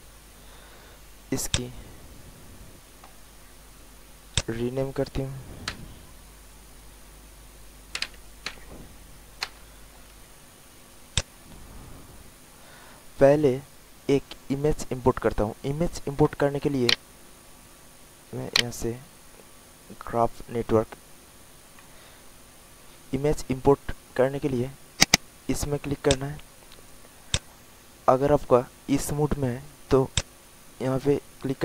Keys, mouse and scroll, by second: 1.5 click, 7.9 m, 11.1-14.0 drag, 16.8-21.1 right drag, 21.7-22.1 scroll up 1, 22.8 alt+middle click, 24.1 alt+middle click, 25.0-31.2 drag.